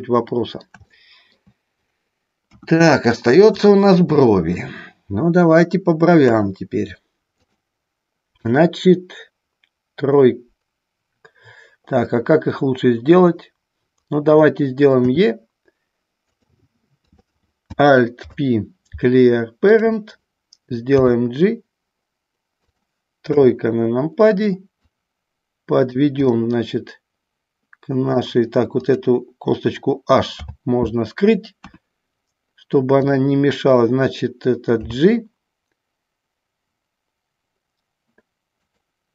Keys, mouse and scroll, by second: 1.1 shift+middle click, 2.6 KP_1, 3.9 middle click, 6.4 KP_1, 7.5 click, 16.5 click, 17.2 click, 18.3 alt+p, 21.1 g, 22.8 click, 23.5 KP_3, 25.0-26.1 drag, 26.5-28.3 middle drag, 29.0 click, 30.5 h, 31.8 KP_1, 33.1 click, 38.7 click.